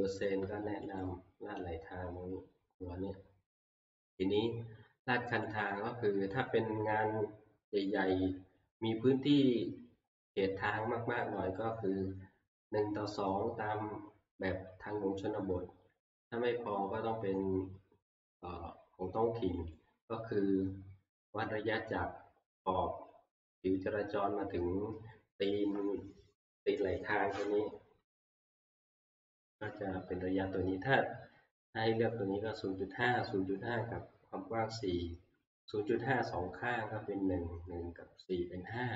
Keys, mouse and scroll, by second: 1.0 click, 5.6 click, 19.7 click, 20.5-21.1 scroll, 26.0 scroll, 32.6 click, 33.4 scroll, 36.5 scroll.